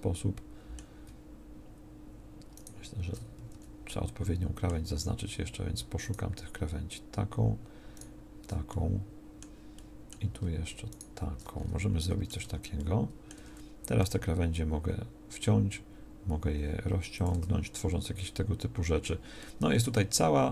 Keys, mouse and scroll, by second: 3.5 a, 9.1-10.1 middle drag, 12.4 Tab, 13.3 Tab, 14.0 s, 17.3 Tab.